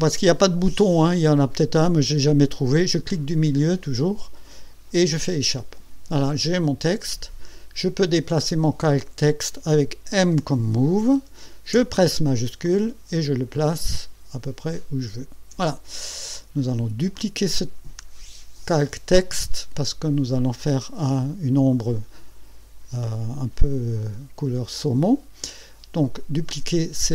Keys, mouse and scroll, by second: 3.4 click, 5.2 Escape, 10.3 m, 12.6-15.5 shift+drag, 17.1 click.